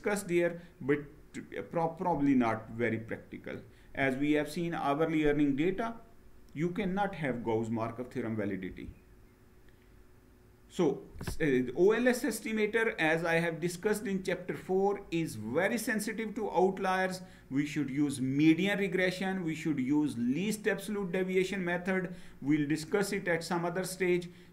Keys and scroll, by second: 8.5 Down.